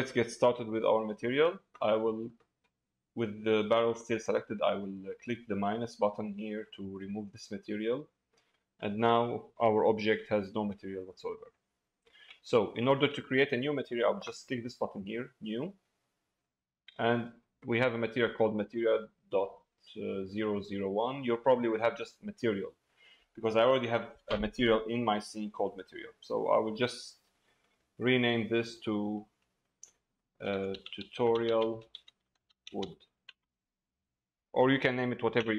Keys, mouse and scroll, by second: 0.9 middle click, 6.9-8.2 drag, 8.5 middle click, 9.7 shift+middle click, 11.4 middle click, 12.4 shift+middle click, 13.1 middle click, 15.8 click, 26.4-35.3 drag.